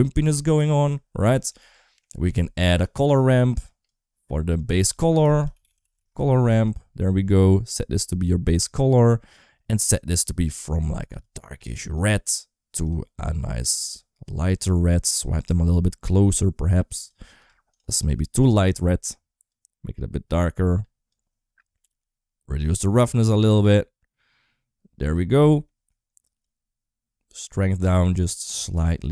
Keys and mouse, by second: 1.2 middle click, 1.6 middle click, 2.6 click, 3.4 click, 4.4-6.5 drag, 7.5 click, 9.5 click, 10.4 click, 12.6 click, 13.0 click, 15.4-16.9 drag, 17.2 click, 18.2 click, 22.5-25.0 drag, 26.2-29.1 drag.